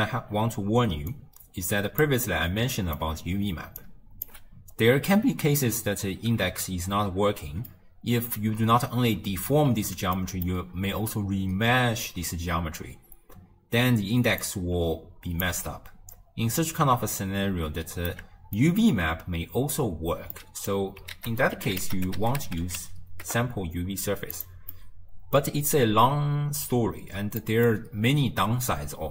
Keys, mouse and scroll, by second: 0.1-1.2 scroll up 3, 1.2 click, 2.3-3.4 middle drag, 3.4 d, 3.9 click, 4.3 d, 6.8 d, 7.7-13.2 middle drag, 14.3 d, 14.5-15.5 drag, 15.5 d, 17.5 d, 18.2 middle click, 19.0-20.2 d, 20.4 middle click, 21.3 ctrl+a, 24.8-27.8 middle drag, 27.8-29.1 scroll up 3.